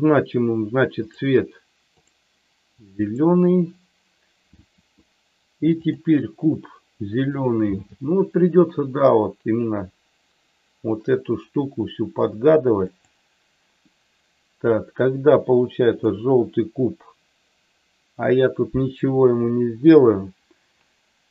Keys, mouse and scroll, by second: 0.9 click, 5.7 click, 7.8 g, 12.8 click, 16.0 click.